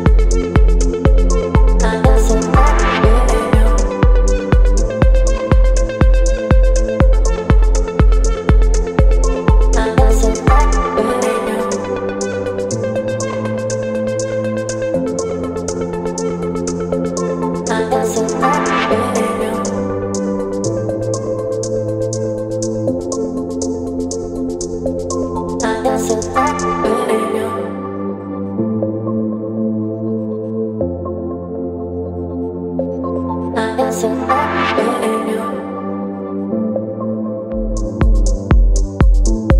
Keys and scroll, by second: 10.2 v, 23.6 Return, 26.7 ctrl+t.